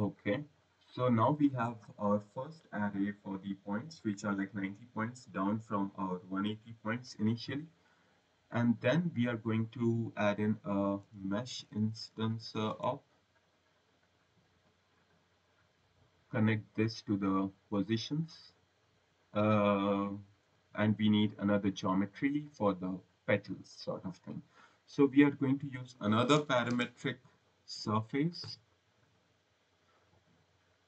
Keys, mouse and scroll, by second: 0.4 click, 0.8 click, 1.5 scroll, 7.3-7.9 scroll, 9.1 click, 10.8-12.8 typing, 13.9 click, 15.0 click, 16.3 click, 18.1 click, 19.2 scroll, 19.4 right click, 21.5 click, 25.3-27.6 typing, 30.0 click.